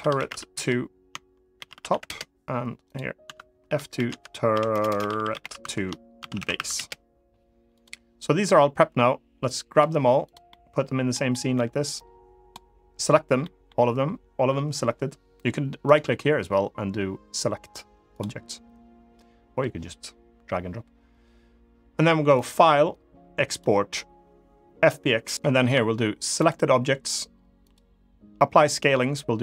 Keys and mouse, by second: 3.0 F2, 4.6 BackSpace, 4.9 r, 7.4 click, 9.2 click, 10.2-10.8 middle drag, 11.0 middle drag, 11.8 click, 13.1 middle click, 15.6-17.9 right drag, 22.1-29.4 drag.